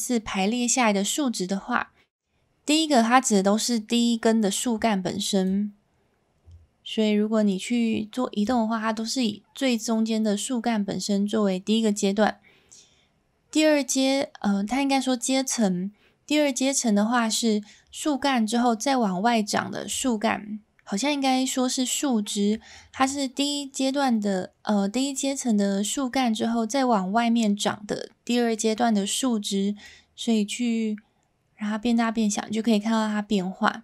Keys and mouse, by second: 5.5-8.5 drag, 29.9-33.8 drag.